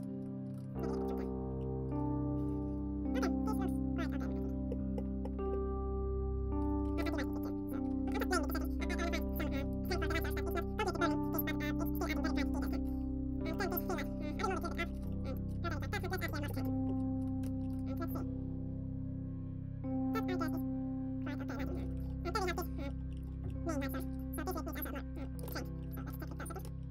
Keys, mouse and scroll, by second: 0.1 middle click, 0.1 g, 1.6 middle click, 1.9-4.9 drag, 2.6 ctrl+s, 6.2 click, 7.7-13.2 drag, 8.6 ctrl+s, 12.7 ctrl+s, 12.8 middle click, 12.8 shift+z, 13.2-14.3 right drag, 13.8-17.3 middle drag, 14.3 ctrl+s, 14.3 g, 15.0 ctrl+s, 17.3 ctrl+s, 17.3 KP_0, 18.7-21.7 drag, 18.7 shift+z, 21.7 shift+z, 21.9 ctrl+s, 21.9-26.9 middle drag, 22.1 right click, 22.7 ctrl+s.